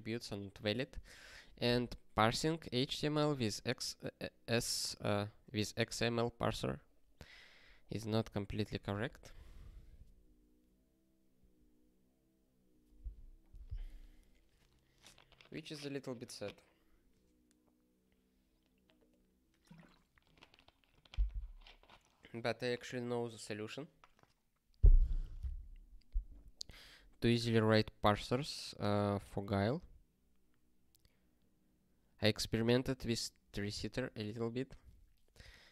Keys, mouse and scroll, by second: 1.2 ctrl+p, 7.7 click, 26.8 click.